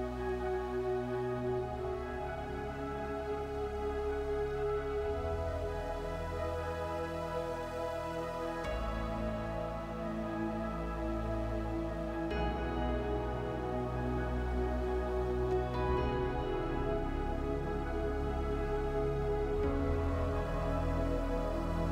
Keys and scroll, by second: 3.6 3, 3.9 2, 4.5 Return, 8.1 6, 8.3 9, 8.9 0, 9.8 Return.